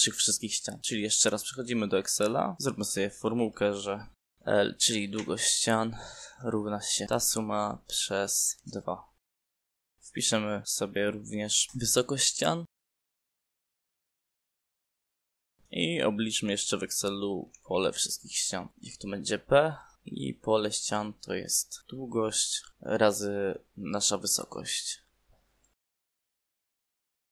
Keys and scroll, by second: 6.6 l, 7.0 Right, 8.2 =, 10.4 /, 10.8 2, 11.1 Return, 13.0 h, 13.5 Right, 15.5 9, 16.0 /, 17.0 5, 17.5 Down, 18.2 Left, 18.7 p, 19.0 Right, 19.4 Left, 19.9 BackSpace, 20.6 shift+p, 21.5 BackSpace, 21.7 Right.